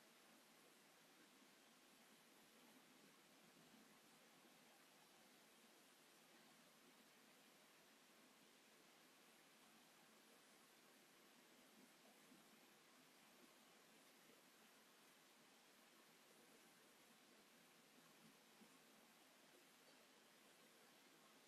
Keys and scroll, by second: 2.3 space, 7.9 m, 10.5 space, 12.4 g, 13.5-14.7 typing, 16.4 p, 19.5 space.